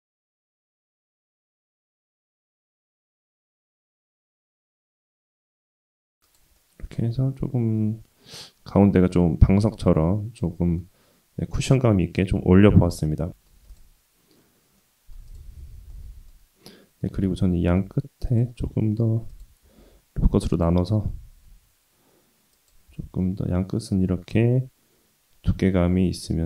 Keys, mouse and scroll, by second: 3.5 Tab, 3.8 s, 6.6-10.8 middle drag, 10.9-11.4 scroll down 2, 11.4-12.6 middle drag, 12.7-13.3 scroll down 1, 13.3 middle click, 13.7 click, 14.8-15.1 middle drag, 15.3 click, 15.6 Tab, 15.9 middle click, 16.4-17.0 scroll up 2, 17.7 ctrl+r, 19.8 ctrl+r, 22.9 Tab, 23.2-26.4 middle drag.